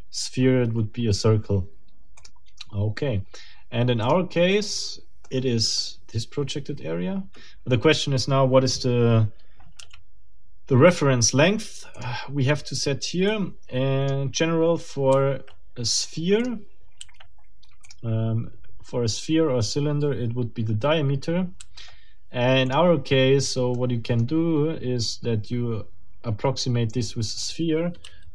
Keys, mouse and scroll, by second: 2.2 click, 4.7 scroll down 2, 5.2 middle click, 13.3 click, 23.7 middle click.